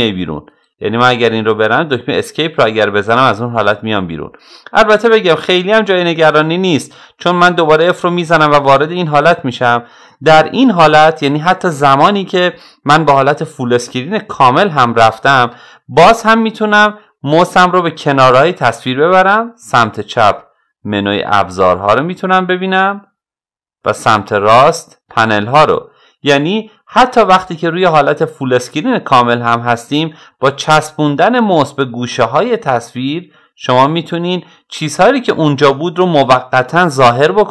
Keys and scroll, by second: 2.0 Escape.